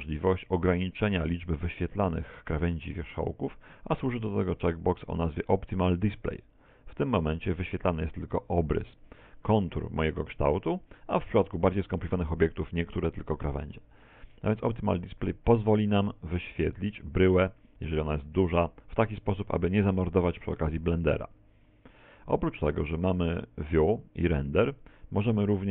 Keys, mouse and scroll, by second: 6.6 click, 12.0 middle click, 13.3 middle click, 21.4 click, 24.4 click, 24.6 click.